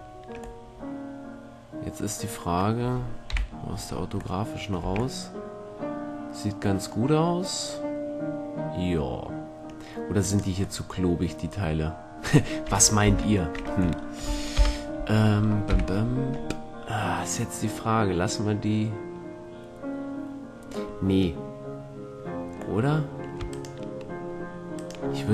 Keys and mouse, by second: 0.8-3.4 middle drag, 3.4 KP_5, 4.0 middle click, 5.5 a, 7.5-10.4 middle drag, 10.4-12.2 right drag, 13.2 ctrl+l, 14.7 KP_1, 15.8 KP_5, 16.6-18.2 middle drag, 21.1-23.6 middle drag, 23.6-25.3 drag.